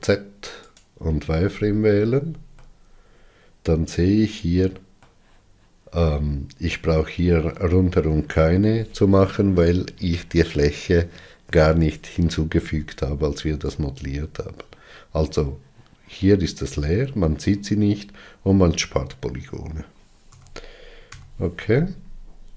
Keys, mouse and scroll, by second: 1.5-2.0 scroll up 6, 2.5-13.3 middle drag, 13.3 scroll down 1, 13.9 scroll down 2, 18.3-19.0 scroll down 7, 21.0 z, 21.9 scroll down 4.